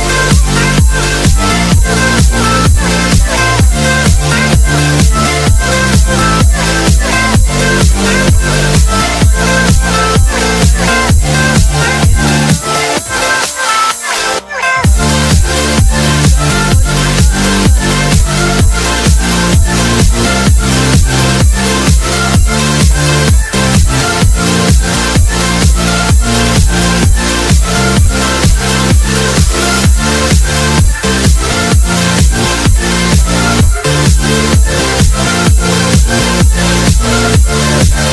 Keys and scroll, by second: 9.2 F2, 26.2 ctrl+k, 26.9 space, 26.9 Escape, 30.8 ctrl+r, 33.1 Down, 34.2 Escape, 34.5 F2.